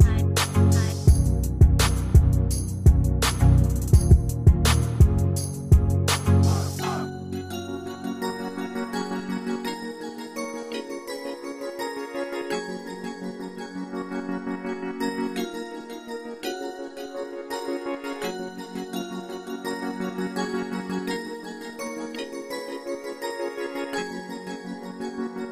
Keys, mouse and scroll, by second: 2.7 ctrl+scroll up 1.